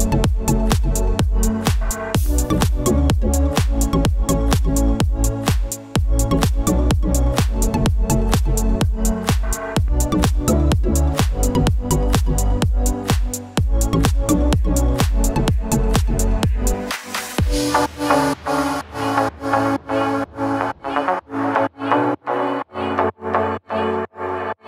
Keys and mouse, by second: 0.1 e, 0.6 shift+z, 0.8 shift+z, 1.0 Tab, 1.3 `, 2.1 shift+middle click, 2.6-3.0 right drag, 3.2 shift+middle click, 3.6 click, 4.2 right drag, 4.6 click, 4.8 right click, 5.1 a, 5.3 right drag, 5.3 a, 5.8 shift+middle click, 7.1 shift+click, 7.2 middle drag, 7.6 middle click, 7.8 shift+click, 8.0 right drag, 8.4 middle click, 8.5 Tab, 8.8 Tab, 9.1 middle click, 10.8 shift+middle drag, 10.9 middle click, 11.2-14.3 typing, 11.3 shift+middle click, 12.1 Tab, 12.3 middle click, 12.8 shift+click, 13.5 click, 14.3 middle click, 15.2 shift+middle click, 15.5 middle click, 15.8 shift+middle click, 16.3 ctrl+r, 17.2 middle click, 17.6 ctrl+r, 18.7 shift+middle click, 18.8 ctrl+z, 19.6 shift+middle click, 19.9 ctrl+r, 20.7 middle click, 21.4 shift+middle click, 21.8 shift+middle click, 22.1 ctrl+r, 23.2 ctrl+r.